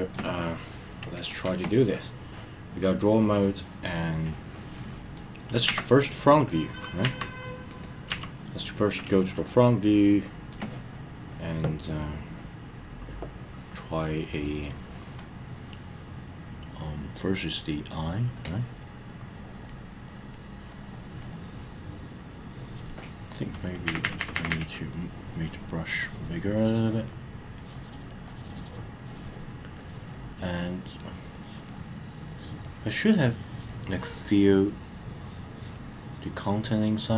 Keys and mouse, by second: 4.7-5.2 middle drag, 7.8 click, 8.1 KP_1, 9.3-10.5 shift+middle drag, 18.4 click, 19.1 click, 20.1 click, 20.7 click, 22.5 click, 24.9 click, 24.9 ], 25.9 click, 26.7-27.1 drag, 27.6 click, 28.3 click, 29.8 click, 31.3-31.7 drag, 32.3-32.6 drag, 33.2-33.7 drag, 34.0 drag, 35.0-35.7 drag, 36.3 drag.